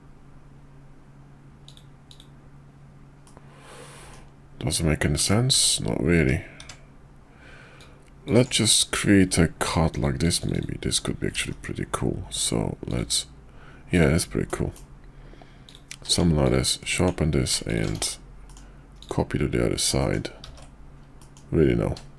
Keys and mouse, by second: 3.2-4.1 middle drag, 5.2 ctrl+z, 6.2 `, 6.6 `, 7.8 click, 8.9-9.6 drag, 11.3 alt+x, 12.9 click, 13.9 click, 14.5 middle drag, 15.6 click, 16.0 q, 17.7 shift+click, 17.9 alt+x, 18.5 middle click, 19.0 click, 20.0 middle click, 20.4 ctrl+z, 21.2 middle click.